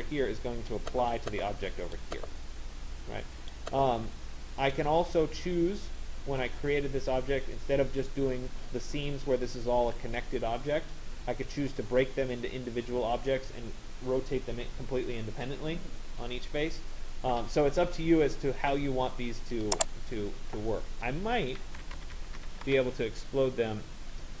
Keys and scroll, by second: 22.2 e, 22.8 Return.